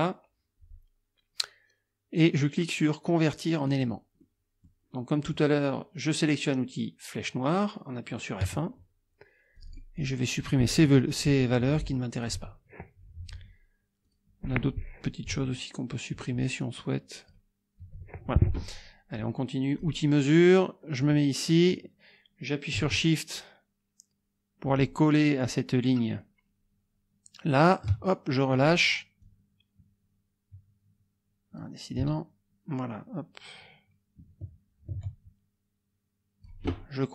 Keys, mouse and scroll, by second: 3.7 click, 4.2 middle click, 8.4 F1, 9.6 click, 10.0 click, 11.3 Delete, 12.2 click, 12.4 Delete, 14.0 click, 15.3 Delete, 16.6-17.5 drag, 17.8 Delete, 19.7 click, 21.0-28.8 drag, 29.2-31.8 drag, 32.0-36.6 shift+drag.